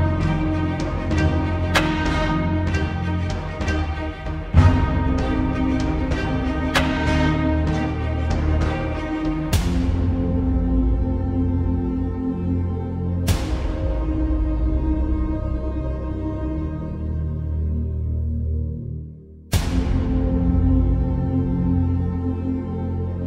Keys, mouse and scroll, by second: 1.0-2.6 typing, 3.5 Left, 4.2 Return, 6.3-12.0 drag, 18.9-23.2 drag.